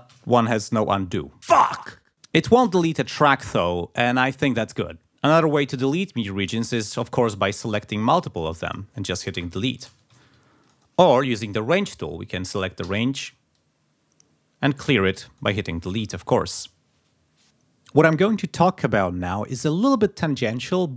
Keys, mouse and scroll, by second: 2.9 shift+right click, 3.5 shift+right click, 3.9 shift+click, 5.1 ctrl+click, 6.9 g, 7.5 click, 9.4 Delete, 9.9 KP_0, 10.2 ctrl+z, 10.7 ctrl+click, 12.9 r, 13.6-15.6 drag, 15.9 Delete.